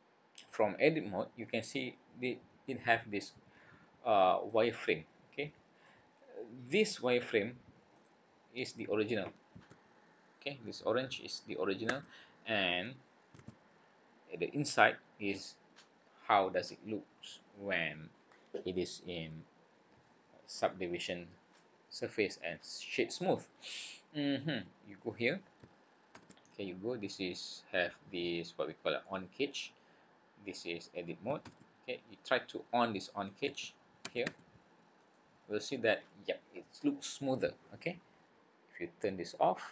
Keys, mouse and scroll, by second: 0.1-0.5 scroll up 4, 1.2 scroll down 2, 2.8-3.3 scroll down 5, 3.3-4.1 scroll up 6, 4.4 middle click, 6.1 scroll up 1, 7.9 click, 9.7 a, 11.8 a, 13.4 alt+a, 14.7 scroll up 1, 22.4-23.0 scroll down 3, 23.3-24.0 scroll up 2, 35.0 click, 36.0 scroll down 1.